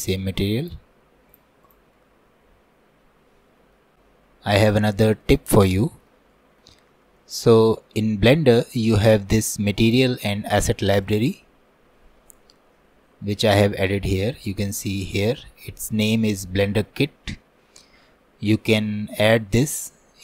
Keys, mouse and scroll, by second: 2.0-3.9 middle drag, 3.9 scroll up 1, 4.0 click, 5.4-11.2 middle drag, 11.2-19.6 drag.